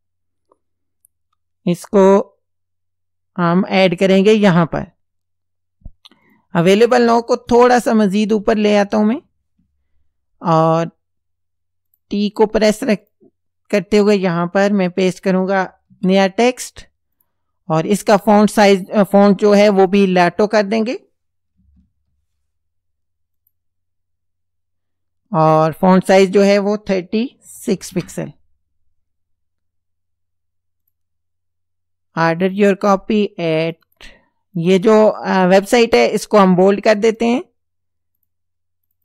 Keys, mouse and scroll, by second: 6.3 click, 7.5 shift+Up, 11.9 click, 13.1 click, 15.9 ctrl+v, 17.2 click, 19.9 click, 21.3-22.4 typing, 23.4 click, 25.8 click, 27.4 KP_3, 27.7 KP_6, 27.9 KP_Enter, 30.8 click, 32.4 click, 33.5 click, 34.6 click, 36.4 click, 36.9 click, 38.2 click, 38.9 click.